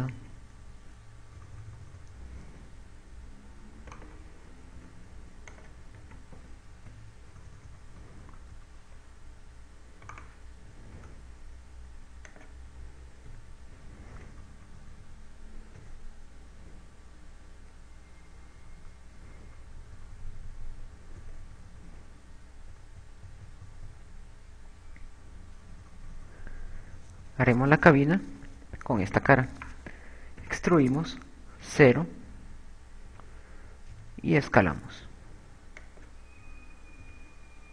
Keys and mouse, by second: 0.9 click, 2.7 KP_6, 2.9 KP_6, 2.9-5.3 KP_6, 5.3 right click, 6.1 click, 6.1 shift+e, 8.5-9.9 typing, 11.2 right click, 11.9 shift+e, 13.7 click, 14.0 Escape, 14.3-17.0 typing, 19.1-22.9 typing, 24.0 KP_6, 24.3 KP_6, 24.9 KP_6, 24.9 KP_6, 26.9 KP_4, 27.1 KP_4, 28.2 KP_4, 28.5 KP_4, 28.7 KP_4, 30.7 right click, 31.1 e, 35.2 s, 36.5 click.